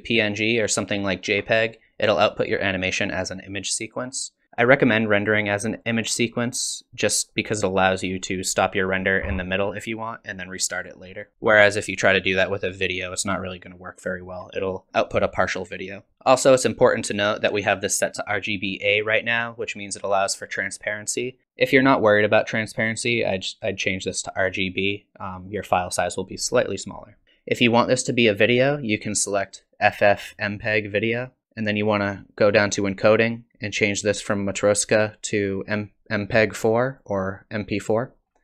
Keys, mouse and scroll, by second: 24.5 click, 28.5 click, 31.4-32.5 scroll down 2, 32.5 click, 33.1-34.3 scroll down 4, 34.7 click, 38.2-38.4 scroll down 3.